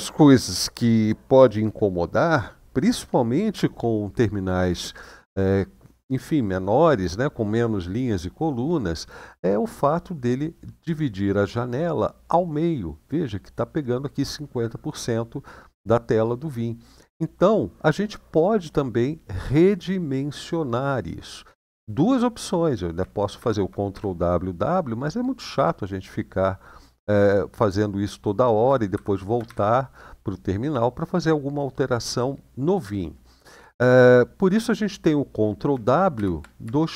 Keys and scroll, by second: 23.1 ctrl+w, 23.7 w, 28.7 ctrl+w, 29.2 w, 35.9 ctrl+w, 36.8 :.